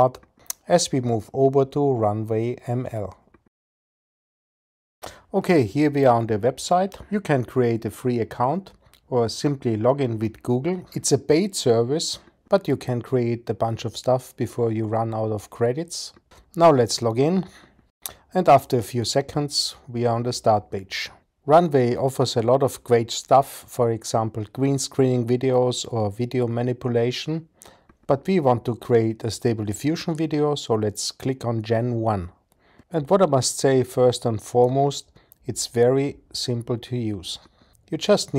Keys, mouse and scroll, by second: 3.8 super+s.